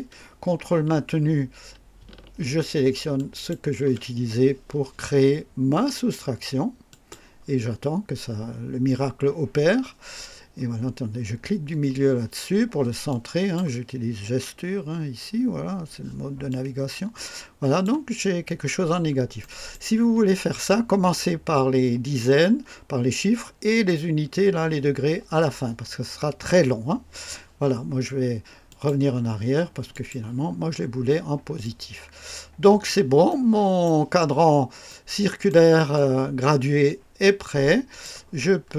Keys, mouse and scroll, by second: 3.1 ctrl+click, 6.8 click, 11.1 middle click, 13.0 click, 16.4-17.9 drag, 18.1 scroll up 2, 18.7 scroll down 2, 19.3-19.8 right drag, 28.6 click, 29.8 click, 30.4-31.1 scroll down 1, 31.5-33.0 drag, 33.2-33.9 right drag, 34.8 right click, 35.8-38.1 drag, 38.4 scroll up 1.